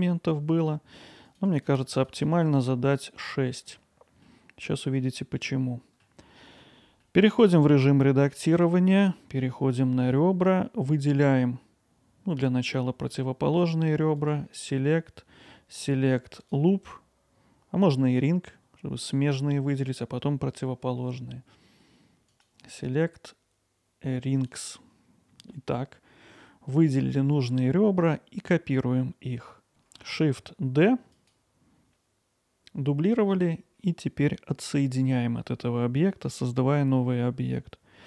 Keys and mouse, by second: 1.3 click, 1.5 click, 1.6 click, 2.0 click, 2.1 click, 2.3 click, 3.7-4.3 middle drag, 5.0-6.0 alt+middle drag, 7.0 middle click, 8.0 alt+middle click, 14.2-16.5 drag, 17.9 middle click, 22.4-24.5 drag, 25.5 alt+middle click.